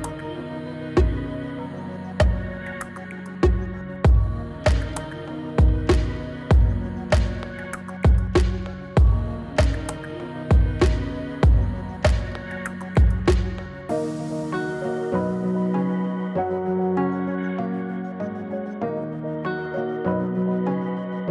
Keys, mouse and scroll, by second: 0.9 Return, 3.1 click, 4.7 Return, 6.8 click, 10.8 Return, 13.2 click, 17.1 click, 20.6 Return.